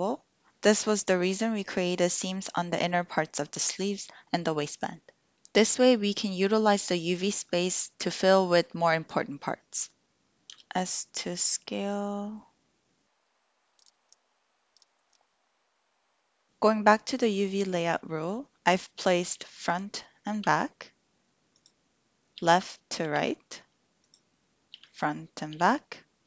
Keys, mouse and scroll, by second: 10.5 s, 13.7 click, 13.8-15.1 typing, 14.3 click, 15.9 drag, 16.0 click, 19.3 l, 21.5 click, 22.4 l.